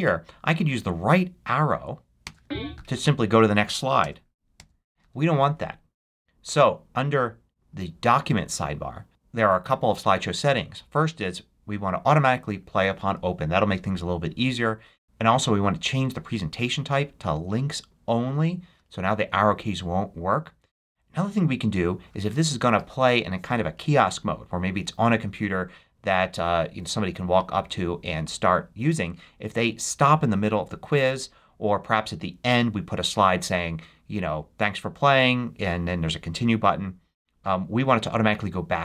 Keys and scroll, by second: 2.1 Right, 5.2 Home.